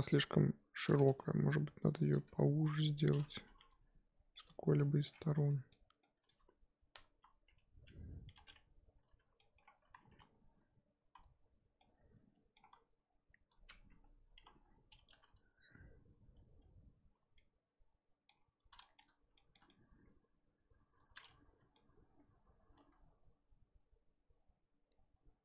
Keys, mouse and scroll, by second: 0.2-1.0 scroll up 2, 1.0 Tab, 2.0 shift+click, 2.3 Tab, 3.3 KP_2, 4.2 scroll down 1, 4.3-5.3 middle drag, 5.3 Tab, 5.7-7.0 middle drag, 7.0 ctrl+KP_1, 8.8 Tab, 9.4 shift+middle click, 9.6 scroll up 2, 9.7 z, 10.3-11.1 scroll up 2, 11.1 z, 11.8-12.6 middle drag, 12.6 z, 14.3 KP_3, 16.3 click, 17.1 scroll down 2, 17.3-18.7 middle drag, 18.7 z, 18.8-22.0 shift+middle drag, 22.0-22.4 scroll up 1, 22.8 g.